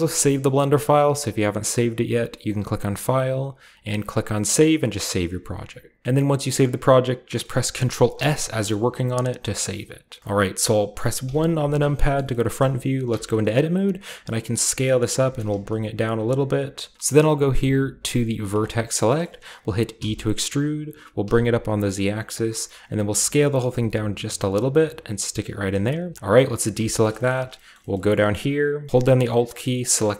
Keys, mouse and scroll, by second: 0.2-1.8 shift+middle drag, 2.9-4.2 drag, 6.0 Return, 6.0 typing, 7.2-8.5 shift+scroll up 1, 7.4-11.1 ctrl+middle drag, 8.1 ctrl+s, 11.2 KP_1, 11.9 shift+middle drag, 12.2 shift+middle drag, 13.0 Tab, 13.3-14.2 scroll up 1, 14.2-15.0 scroll up 1, 14.2 s, 15.0-16.3 drag, 15.2 g, 15.4 z, 16.1 s, 16.9 click, 18.4-19.9 drag, 19.0-21.2 shift+middle drag, 19.0-19.9 shift+scroll up 1, 19.9-21.2 scroll up 1, 19.9 e, 21.2 z, 22.4 click, 22.4-23.0 typing, 25.4 click, 26.1 middle click, 26.1-26.7 scroll down 1, 26.1-26.7 typing, 27.0 middle click, 27.3 shift+middle click, 27.4-29.7 scroll up 1, 27.7 middle click, 27.9 shift+middle click, 29.7-30.1 alt+right drag.